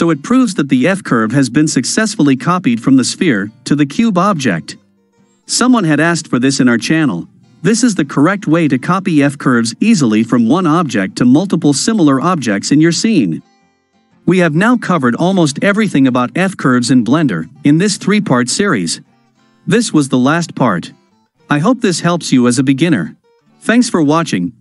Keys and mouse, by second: 2.3 click, 3.8 click, 6.1 click, 14.1-21.6 ctrl+middle drag.